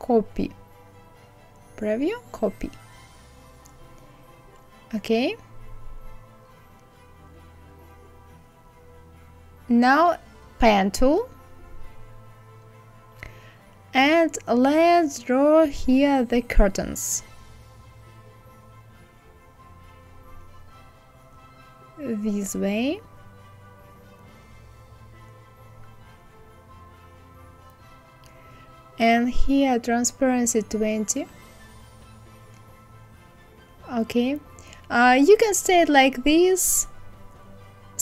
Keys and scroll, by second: 29.8 KP_2, 30.1 KP_0, 30.3 Return.